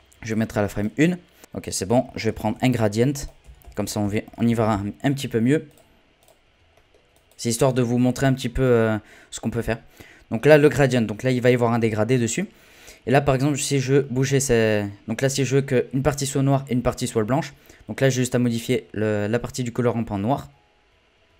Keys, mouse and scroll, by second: 1.4 z, 2.4 shift+a, 6.7 middle click, 7.1-9.5 drag, 9.5-13.9 middle drag, 18.1-21.1 drag.